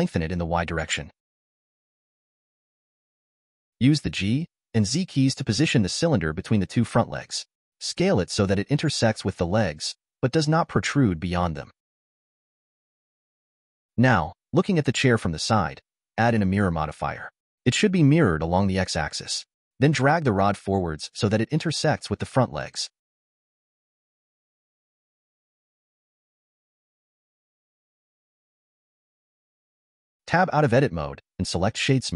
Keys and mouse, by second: 0.1 click, 3.6 g, 7.6 s, 12.3-13.8 middle drag, 15.5-17.9 drag, 19.2 click, 20.2 click, 25.8 g, 28.9-30.9 middle drag, 31.9 Tab.